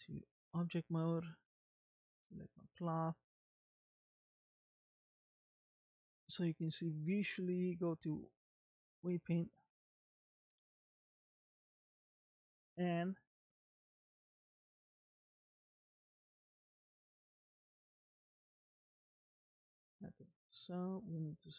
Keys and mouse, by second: 2.5 click, 3.5 middle click, 5.0-8.8 drag, 10.0 middle click, 12.4 click, 14.2 click, 16.8-19.5 drag.